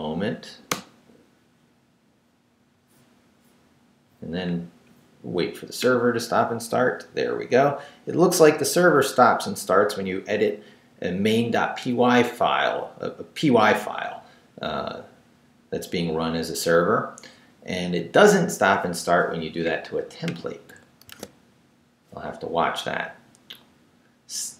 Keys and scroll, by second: 0.3 w, 0.7 Return, 21.0 super+r.